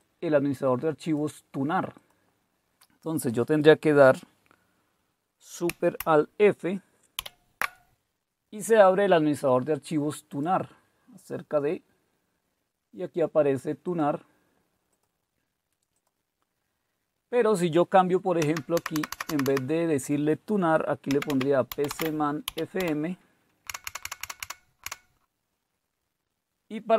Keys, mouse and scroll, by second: 2.0-4.1 drag, 7.2 alt+super+f, 10.3 click, 11.1 click, 11.7-12.7 drag, 13.9 click, 18.4 Down, 18.7 Right, 18.9 Right, 19.1 Right, 19.3 Right, 20.8-24.9 typing, 23.7 Delete, 23.8 Delete.